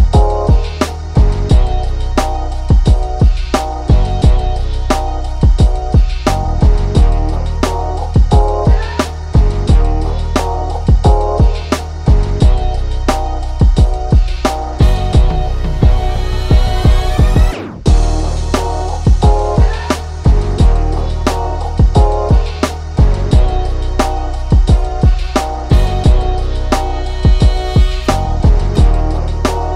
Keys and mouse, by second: 4.0-6.1 drag, 7.0 click, 7.8 click, 11.0-12.4 drag, 15.0 right click, 15.5 click, 17.0-20.9 drag, 20.9 ctrl+-, 21.4-22.5 drag, 22.6 click, 24.2 ctrl+z, 24.6-28.8 drag, 28.8 ctrl+z, 29.2 click.